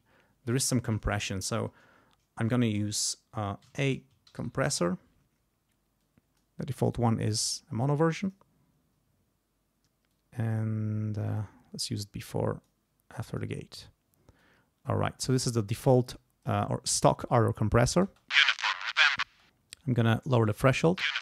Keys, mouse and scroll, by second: 3.4-5.1 typing, 6.0 click, 7.3 click, 8.2 click, 10.1-12.8 drag, 13.2 click, 14.4 click, 15.8 click, 18.1 space, 19.3 space, 19.7 click, 20.7 space.